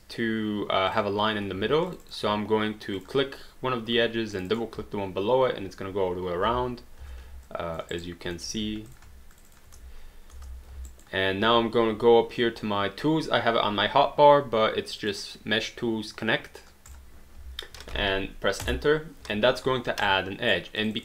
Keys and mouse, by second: 0.9 click, 1.9 shift+click, 4.4 shift+click, 6.5 space, 7.5 alt+click, 7.9 alt+right click, 8.4 alt+middle click, 8.5 q, 8.9 click, 9.4 shift+click, 9.8 space, 10.9 alt+right click, 15.0 click, 16.9 click, 18.6 Return, 20.1 right click, 20.8 click.